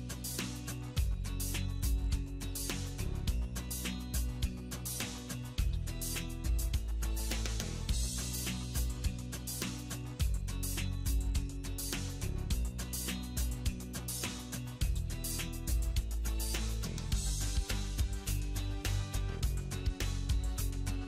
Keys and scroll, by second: 5.7 alt+w, 18.1 alt+w.